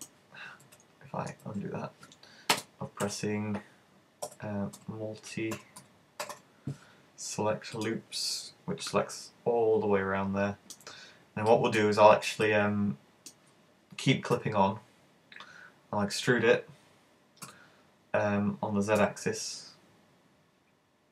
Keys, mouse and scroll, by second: 0.0 click, 0.7 super+z, 1.5 z, 2.6 space, 9.0 middle click, 11.0-11.5 scroll down 5, 11.5 shift+middle click, 11.9-12.5 scroll up 2, 12.5 shift+middle click, 14.4 e.